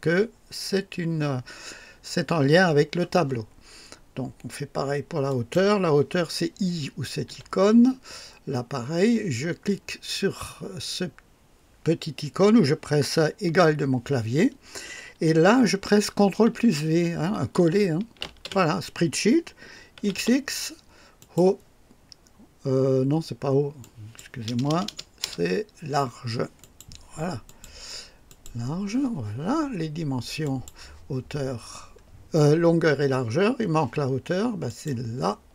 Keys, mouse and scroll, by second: 5.3 click, 7.3 i, 13.4 Menu, 13.6 =, 18.2 ctrl+v, 18.2 ctrl+v, 20.0 x, 20.0 x, 20.2 x, 21.2 click, 23.8 click, 23.8-25.2 typing, 26.6 click, 27.5 click, 28.3 click, 30.4 click, 31.6 scroll down 1, 34.7 click.